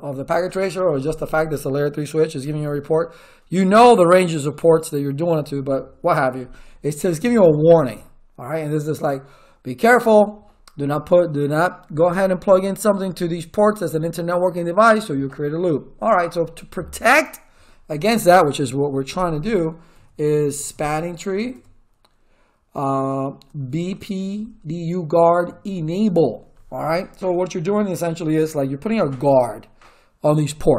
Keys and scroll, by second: 19.9 s, 20.5 p, 20.7 Tab, 21.3 a, 21.5 Tab, 23.9 b, 24.3 Tab, 25.4 e, 25.6 Tab.